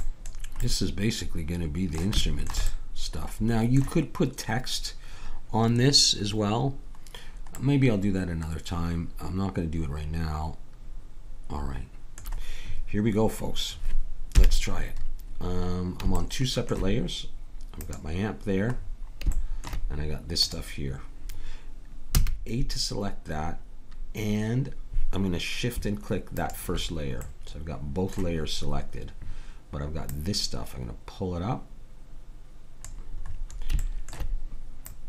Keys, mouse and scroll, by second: 14.3 KP_1, 16.2-17.6 middle drag, 17.8-20.2 middle drag, 20.4-22.0 middle drag, 22.0 click, 22.1 a, 26.4-28.2 drag, 27.3-30.1 middle drag, 30.1-31.9 drag, 33.2-34.9 middle drag, 34.9-35.0 drag, 34.9-35.0 right drag.